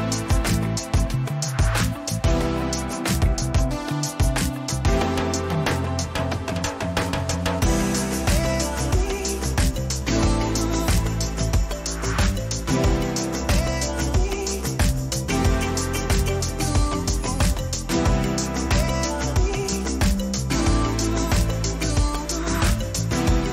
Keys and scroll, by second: 0.2 ctrl+t, 4.5 Left, 6.4 Return, 7.7 Right, 9.7 Left, 11.6 ctrl+-, 14.7 ctrl+t.